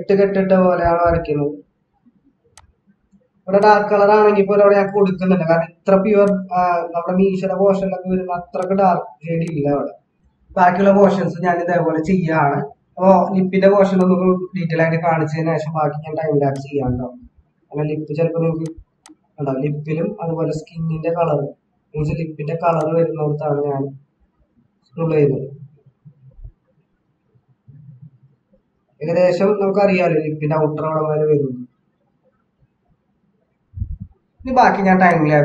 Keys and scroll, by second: 10.1 ctrl+-, 12.7 ctrl+=, 12.9 ctrl+=, 14.6 ctrl+-, 34.1 ctrl+-.